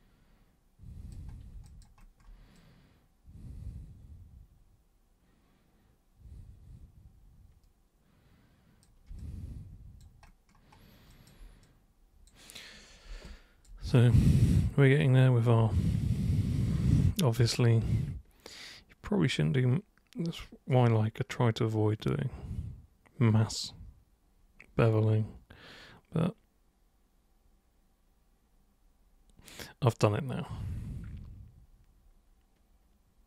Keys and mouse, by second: 1.6 alt+super+click, 2.6-8.8 super+drag, 9.2 alt+super+click, 11.1 alt+super+click, 11.6 super+click, 13.1 super+b, 13.3 click, 13.9-33.2 super+drag.